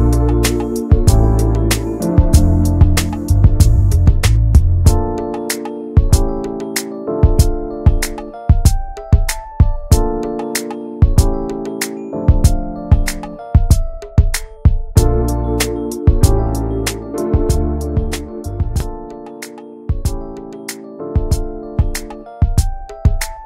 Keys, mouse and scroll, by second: 1.5 click, 2.2 scroll down 2, 2.4-3.7 middle drag, 4.1 scroll down 2, 4.6 shift+middle click, 5.0 shift+d, 5.9 click, 6.9 `, 7.6 shift+middle click, 7.8-8.3 scroll up 1, 8.3 click, 9.9 alt+middle click, 10.2 scroll down 4, 10.5 middle click, 11.0 Tab, 11.1 click, 11.6 scroll down 5, 12.0-13.0 shift+middle drag, 13.0 click, 13.3 ctrl+s, 13.7 click, 14.0 `, 14.6 click, 14.8 middle click, 15.0 scroll up 2, 15.3-18.6 middle drag, 18.6 ctrl+s, 19.2 middle click, 19.4 ctrl+s, 19.6 click, 20.9 middle click, 21.2 ctrl+s, 22.4 click.